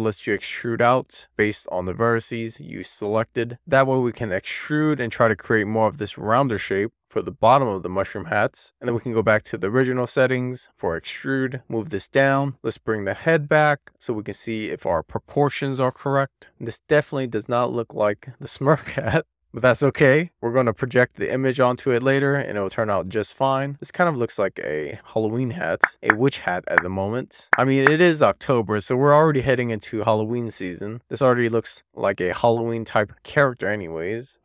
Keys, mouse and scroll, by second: 0.5 right click, 1.2 click, 4.3 middle click, 4.5 scroll down 2, 4.6 middle click, 5.4 scroll up 2, 5.6 middle click, 6.5 scroll up 2, 6.6 middle click, 7.2 scroll down 1, 7.4 middle click, 8.6-10.5 drag, 11.4 w, 11.6 middle click, 12.2 click, 12.6 right click, 12.9 click, 13.4-13.9 scroll down 1, 13.9 middle click, 14.5 alt+middle click, 15.5-16.1 scroll up 1, 16.1 scroll up 3, 16.2 middle click, 16.6-17.3 scroll down 5, 17.4 shift+middle click, 17.7 middle click, 19.2 alt+middle click, 19.9-21.3 scroll up 4, 21.5 alt+z, 22.1-22.5 scroll up 2, 22.5 alt+z, 23.7 click, 24.0 middle click, 24.5 middle click, 25.1 middle click, 25.6 super+z, 26.0 scroll down 1, 26.3-27.4 middle drag, 27.4 alt+z.